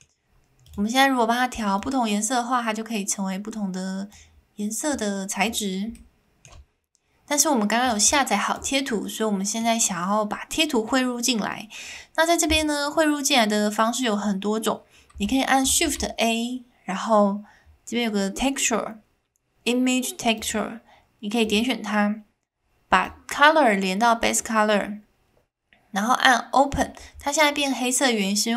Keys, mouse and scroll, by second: 0.7 click, 4.9 click, 5.9 click, 7.8 shift+middle click, 8.0 click, 8.9 middle click, 15.8 shift+a, 23.0 click.